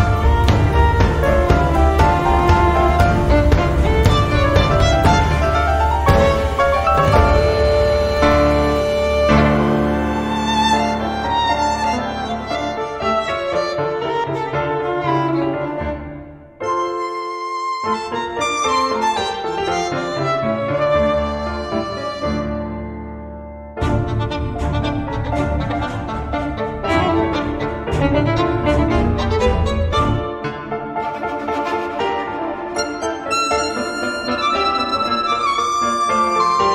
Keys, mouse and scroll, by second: 0.5-2.5 typing, 3.3 click, 4.2 click, 5.4 click, 7.5-16.2 drag, 18.2 click, 19.6 scroll down 2, 21.0-22.9 drag, 24.7 click, 27.5 scroll down 2, 27.8 scroll up 2, 29.0 click, 30.0 click, 31.2-31.8 scroll down 1, 32.0-32.5 scroll down 1, 33.6 click, 34.5 click.